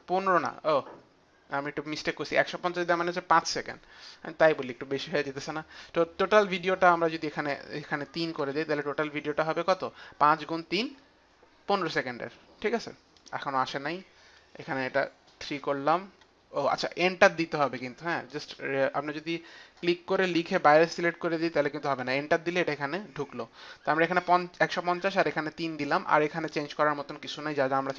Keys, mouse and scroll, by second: 7.3 click, 8.3 click, 8.3 KP_3, 11.7 click, 13.1 click, 15.3 click, 15.3 KP_3, 17.5 Return, 19.5 Return, 19.5 click, 20.1 Return, 20.1 click, 20.1 KP_5, 20.1 KP_1, 21.7 click, 21.7 KP_0, 21.7 KP_5, 21.7 KP_1, 21.9 Return, 24.4 Return, 24.4 KP_0.